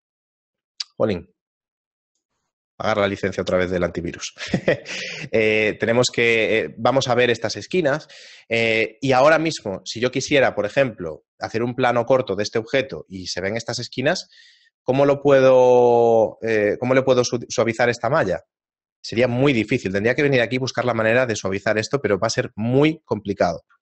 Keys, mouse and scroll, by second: 8.7 right click, 19.2 Tab, 20.4 shift+middle click, 22.4 middle click, 23.2-23.8 scroll down 4.